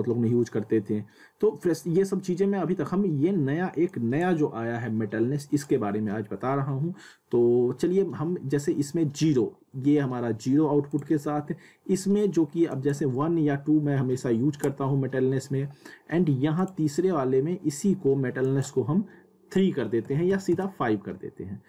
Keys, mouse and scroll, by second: 3.9-5.4 drag, 10.9 click, 16.5 click.